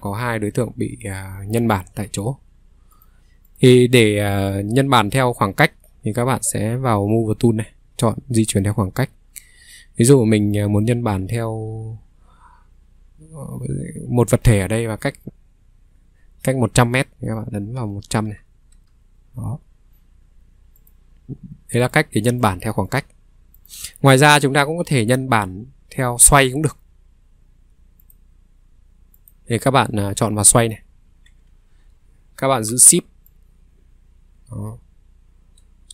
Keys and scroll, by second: 17.5-18.5 typing, 18.7 Return.